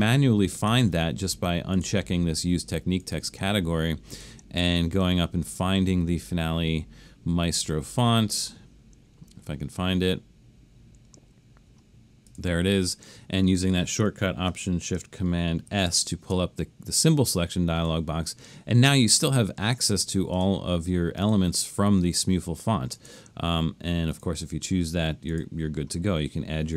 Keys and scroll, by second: 15.7 alt+shift+super+s.